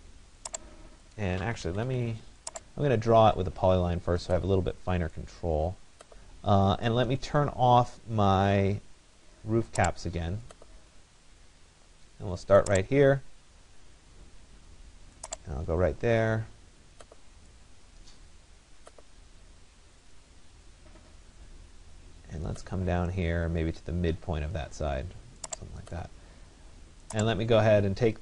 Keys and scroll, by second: 1.3 Escape.